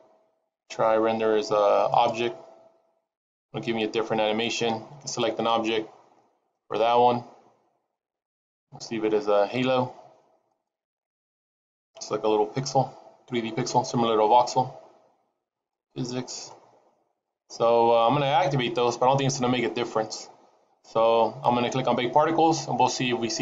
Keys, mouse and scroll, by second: 8.7 click, 15.8 click, 17.1-18.8 scroll down 4.